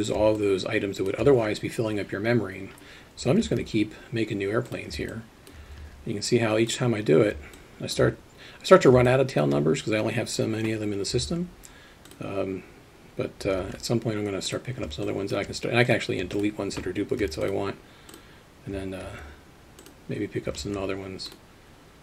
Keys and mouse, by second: 0.6-2.1 alt+shift+middle drag, 3.9 alt+d, 5.4 alt+shift+click, 6.2 alt+d, 12.1 alt+d, 14.0 alt+d, 15.1 alt+shift+middle click, 16.4 shift+click, 17.4 x, 19.5 alt+d, 21.0 alt+d.